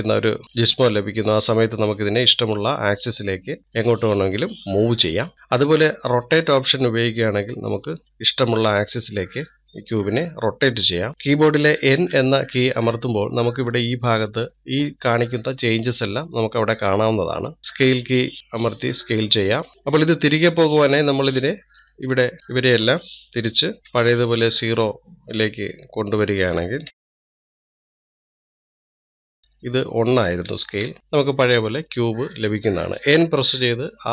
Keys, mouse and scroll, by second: 0.4 click, 1.1-2.3 middle drag, 2.3 click, 3.3 middle click, 3.6 click, 4.8 click, 6.7-7.9 drag, 11.1 click, 12.4 n, 17.7 click, 24.3-31.8 drag, 31.8-34.1 middle drag.